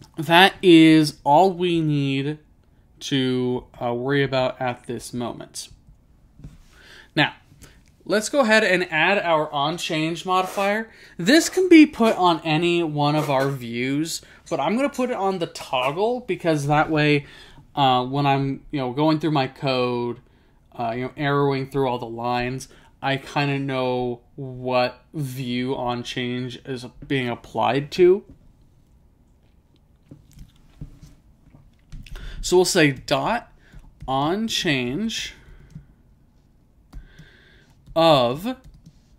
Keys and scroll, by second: 3.7 Return, 4.4 typing.